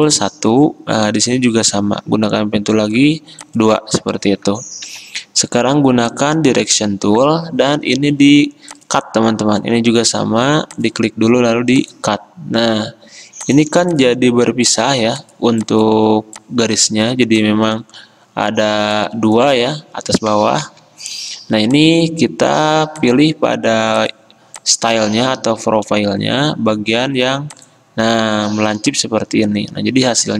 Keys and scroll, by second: 0.0 p, 4.9 a, 20.7 ctrl+z.